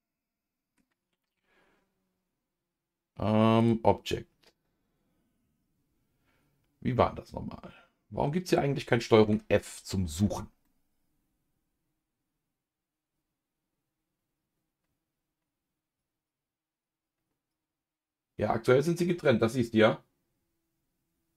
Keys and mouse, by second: 3.6-8.5 drag, 9.2 ctrl+f, 10.6-21.3 middle drag.